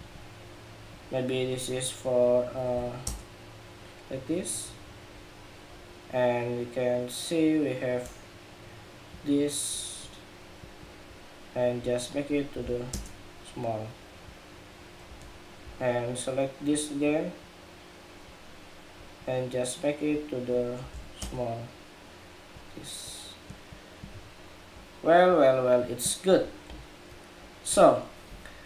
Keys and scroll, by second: 26.4 super+-.